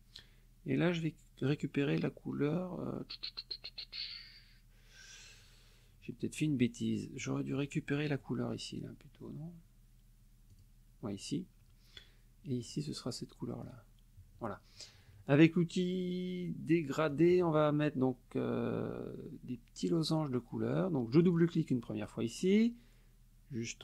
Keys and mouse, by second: 1.5 click, 7.6 click, 10.5 click, 12.6 click, 13.6 click, 17.1 click, 21.1 click.